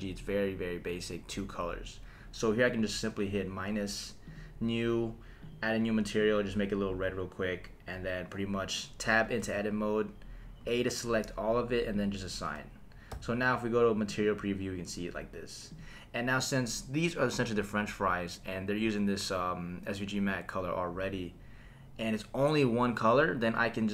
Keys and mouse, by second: 2.7 click, 4.2 click, 5.4 click, 9.4 Tab, 10.6 a, 11.9 click, 13.1 Tab, 14.1 click, 15.7 click.